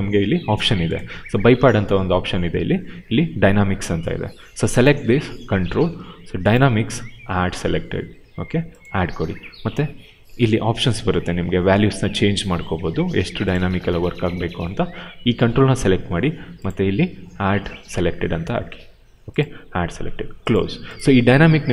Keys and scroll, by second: 0.8 w.